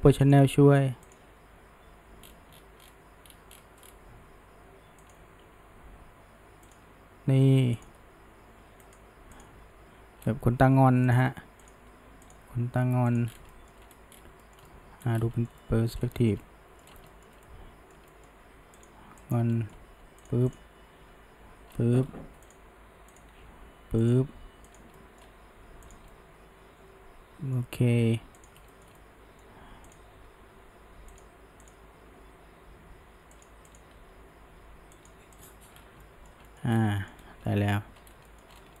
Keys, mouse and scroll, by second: 0.3 click, 1.1 click, 1.8 g, 5.4 r, 7.8 click, 8.0 g, 9.4 click, 9.6 g, 11.7 click, 12.3 click, 12.5 g, 13.3 scroll down 1, 13.5 shift+middle drag, 13.8-14.4 scroll up 1, 14.4-15.2 shift+middle drag, 15.2 scroll up 1, 15.4-16.0 shift+middle drag, 16.0 scroll up 1, 16.2-16.9 shift+middle drag, 16.9 scroll, 17.1-18.4 shift+middle drag, 18.4 g, 19.2 click, 19.6-19.9 middle drag, 19.9 g, 20.5 drag, 21.0 g, 23.2 click, 23.4 g, 24.7 click, 25.0-25.4 middle drag, 25.4 g, 26.1-28.0 middle drag, 28.0 g, 28.7-29.9 shift+middle drag, 29.9 drag, 30.2 g, 31.7 click, 32.2 g, 33.7 click, 34.0 g, 35.4 click, 35.8 scroll down 1, 36.0-36.7 middle drag, 36.7 scroll down 1, 36.9 middle click, 37.2 scroll up 1, 37.5 middle click, 38.0-38.8 scroll up 2, 38.3 shift+middle click.